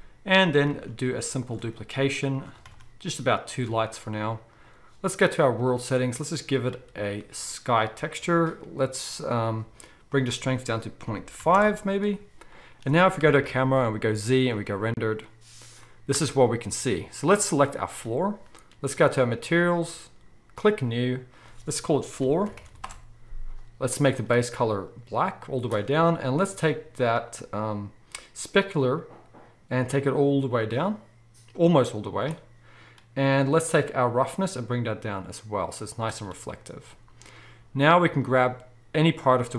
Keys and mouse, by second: 0.7 shift+d, 1.5-2.5 middle drag, 1.6 r, 2.6 shift+d, 3.7 r, 5.6 click, 6.7-17.6 drag, 13.2 KP_0, 14.1 z, 17.6-20.5 middle drag, 20.5-24.2 drag, 22.5 o, 24.2-28.6 middle drag, 28.6-38.3 drag, 38.3-39.5 middle drag.